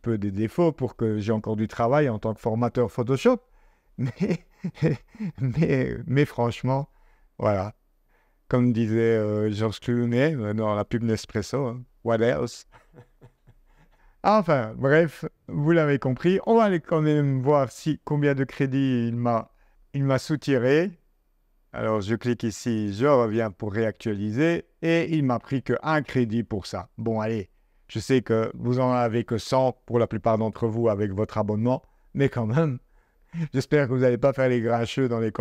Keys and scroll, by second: 27.3 super+Tab.